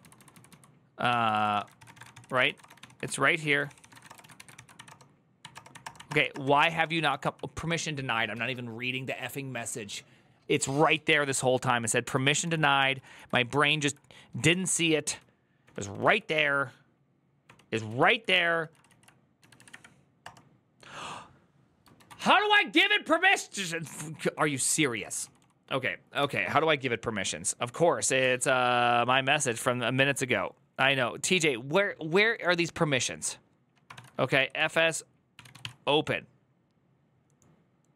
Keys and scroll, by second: 0.0-4.6 typing, 4.7 Return, 5.2 Up, 5.3 Return, 5.5 Up, 5.6 Return, 5.7 Up, 5.9 Return, 6.0 Up, 6.1 Return, 6.2 Up, 6.5 Up, 6.6 Return, 6.8 Up, 6.9 Return, 7.0 Up, 7.3 Return, 12.0 ctrl+a, 12.2 [, 12.4 ctrl+u, 12.6 ctrl+u, 12.7 ctrl+u, 12.9 ctrl+u, 14.5 ctrl+d, 14.6 ctrl+d, 15.4 ctrl+d, 16.1 ctrl+d, 16.1 ctrl+u, 17.2 ctrl+d, 18.2 ctrl+c, 18.9-19.9 typing, 20.0 Return, 21.7-22.5 typing, 24.1-24.5 typing, 26.0 typing, 33.7 ctrl+f, 33.8-35.9 typing.